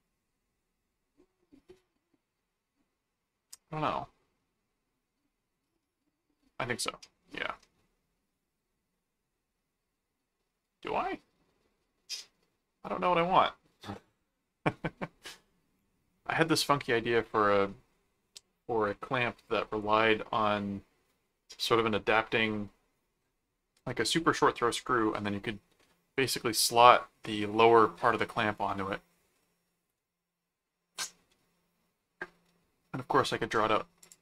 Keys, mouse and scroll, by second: 34.0 click.